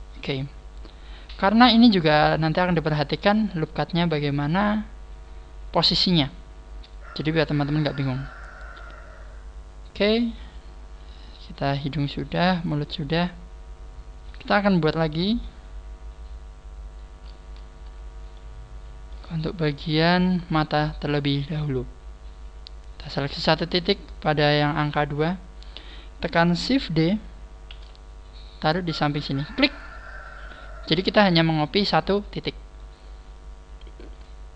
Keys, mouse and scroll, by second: 0.5 scroll down 1, 0.7 a, 1.2 scroll down 3, 3.9-5.3 scroll down 1, 7.6-8.0 scroll up 4, 8.5-9.1 scroll down 1, 9.4 scroll down 1, 9.6 scroll up 1, 10.1 middle click, 11.2 middle click, 15.1 KP_1, 16.7-17.2 scroll down 3, 18.3 shift+middle click, 19.9-20.5 scroll down 2, 20.5 shift+middle click, 23.6 right click, 25.5 scroll up 5, 30.7 scroll up 3, 31.6-31.9 scroll up 3, 31.9 scroll down 1, 33.0 scroll down 2, 33.3 click.